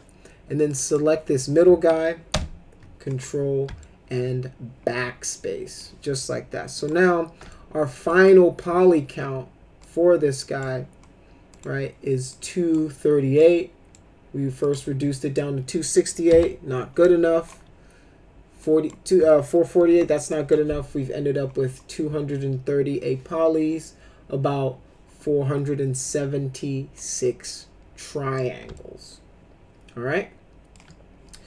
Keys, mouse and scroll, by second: 0.6 click, 0.8 click, 2.3 ctrl+BackSpace, 3.8-5.8 alt+middle drag, 6.7 click, 7.5 alt+middle click, 8.1 middle click, 9.8 shift+click, 11.5 click, 12.3 click, 13.3 click, 14.6 click, 16.3 Delete, 17.0 click, 18.6 click, 19.3 middle click, 19.9 Delete, 20.3 click, 26.9-28.3 drag, 28.7-30.7 alt+middle drag.